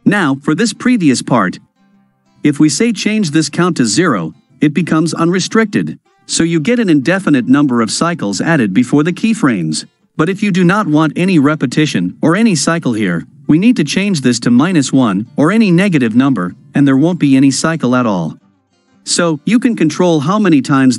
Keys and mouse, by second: 2.7-4.3 drag, 13.1-15.2 drag.